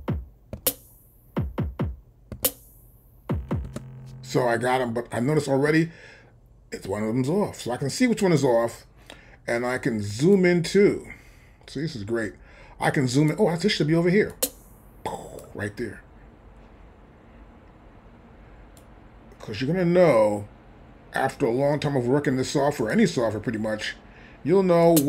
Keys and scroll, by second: 0.6 c, 2.3 c, 3.6 space.